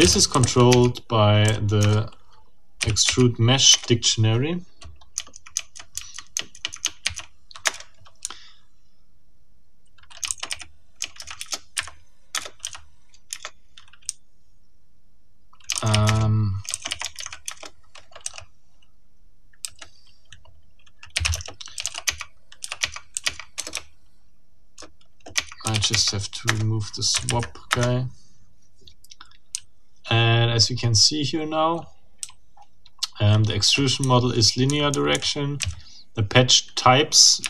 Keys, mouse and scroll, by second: 0.0-2.8 typing, 3.0 Tab, 3.7 Return, 7.0 shift+r, 7.6 shift+Return, 8.2 shift+j, 10.0-11.2 typing, 11.4 shift+Return, 11.8 shift+Up, 12.3 shift+Return, 12.6 shift+r, 13.3 shift+Return, 14.1 shift+j, 15.5-17.7 typing, 20.9-23.6 typing, 22.8 Tab, 23.2 Tab, 25.4 Tab, 25.4-26.2 typing, 26.4 Return, 27.2 Up, 27.7 Return, 29.5 j, 32.2 k, 34.0 j, 35.6 k.